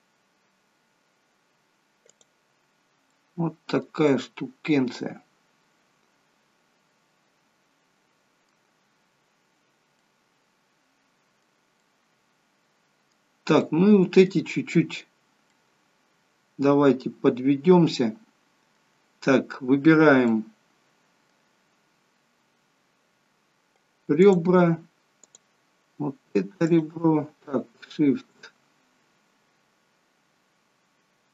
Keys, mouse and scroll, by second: 2.7 scroll down 3, 3.2 middle click, 4.2 middle click, 10.1 middle click, 11.9 middle click, 13.7 middle click, 15.7 middle click, 20.3 middle click, 24.3 click, 25.4 click, 26.7 shift+click, 26.8 shift+click.